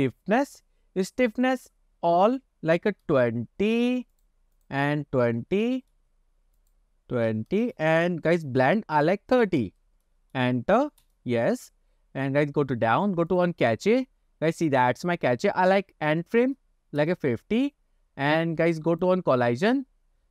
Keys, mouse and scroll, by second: 1.5-4.5 drag, 4.6-6.4 drag, 6.7-8.2 drag, 8.7-11.4 drag, 12.0-13.4 scroll down 7, 13.4 click, 13.7-15.1 scroll down 3, 15.1-17.5 drag, 17.9-19.0 scroll down 3, 19.0 click, 19.5-20.1 scroll down 3.